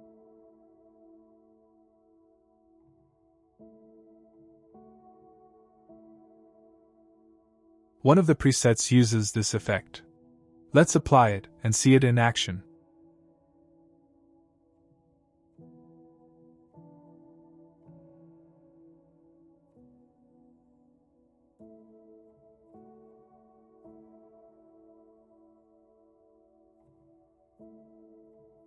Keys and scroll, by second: 22.9 w, 23.4 a, 24.7 w, 26.7 d, 27.4 s.